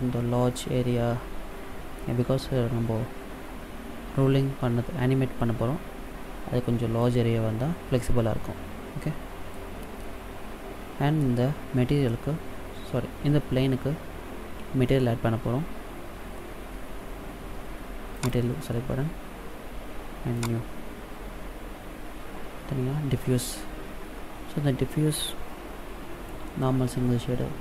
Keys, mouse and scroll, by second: 6.9 middle click, 18.0 click, 20.2 click.